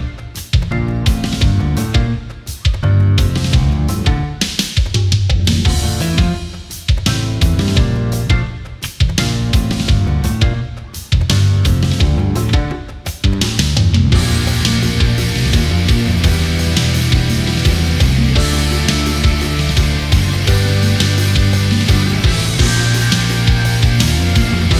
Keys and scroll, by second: 4.3 space, 7.9 ctrl+z, 11.3 ctrl+z, 13.6 ctrl+z.